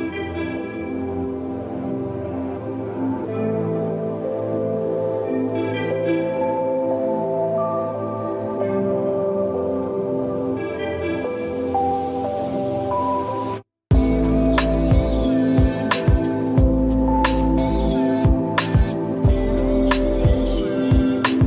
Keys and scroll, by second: 0.6 space, 9.3 space, 16.3 space, 20.6 ctrl+e.